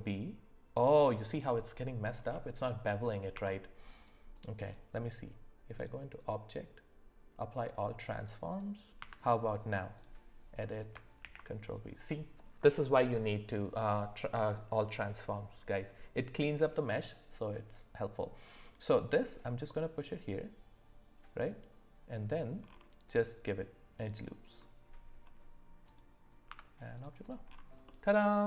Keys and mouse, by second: 2.6 middle click, 3.3 Tab, 4.6 click, 5.7 click, 6.2-7.7 drag, 8.2-8.6 drag, 9.0 Tab, 11.2 ctrl+b, 26.5 Tab, 27.2 click, 27.9 middle click.